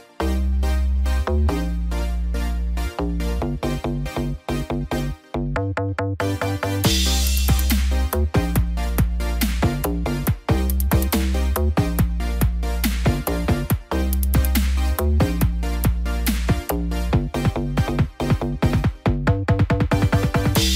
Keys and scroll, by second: 17.5 ctrl+t.